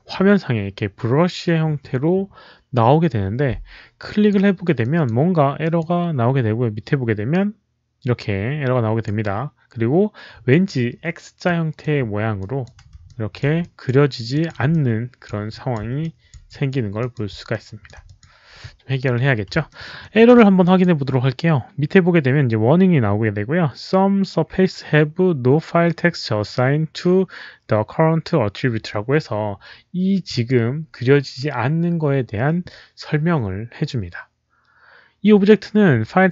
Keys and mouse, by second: 3.9 click, 4.7 click, 5.5 alt+click, 6.7 alt+click, 6.7 alt+right click, 6.7 alt+middle click, 11.3 click, 12.3 click, 13.0 alt+click, 13.5 alt+click, 14.2 alt+click, 14.7 alt+click, 15.4 click, 15.9 alt+click, 16.4 alt+click, 16.9 alt+click, 17.4 alt+click, 17.9 alt+click, 19.7 alt+middle click, 19.9 alt+click, 20.5 alt+click, 22.7 alt+click, 22.7 alt+middle click, 26.7 alt+click, 26.7 alt+middle click, 28.8 alt+click, 28.8 alt+middle click, 30.2 alt+click, 33.4 click.